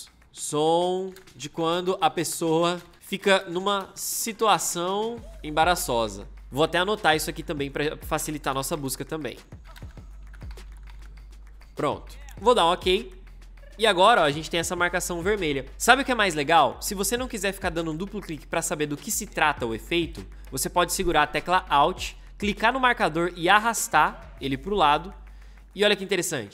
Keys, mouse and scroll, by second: 0.2-6.9 typing, 8.3 Return, 8.5-11.3 typing, 23.0-26.0 alt+drag.